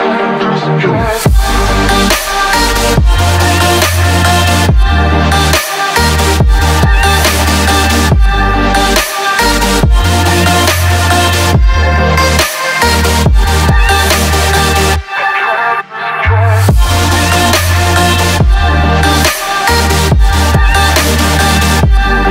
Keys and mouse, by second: 4.7-5.9 drag, 7.6-10.6 drag, 11.3-13.4 drag, 14.8-18.3 drag, 18.9 ctrl+s, 19.2 a, 19.3 a, 20.5 click, 21.6 a.